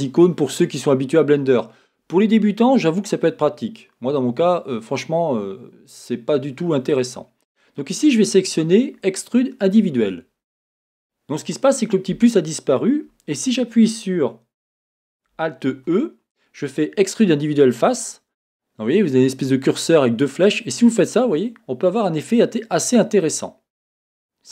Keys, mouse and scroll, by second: 6.9-23.0 drag, 15.7 alt+e, 23.3-24.5 middle drag.